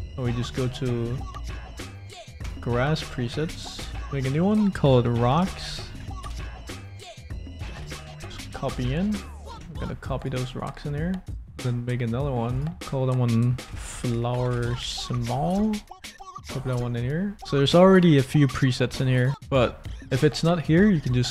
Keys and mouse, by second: 3.9-6.2 drag, 4.0 BackSpace, 4.2 BackSpace, 4.5 BackSpace, 7.8 ctrl+v, 10.1 shift+click, 12.5 click, 12.7-15.8 drag, 15.8 l.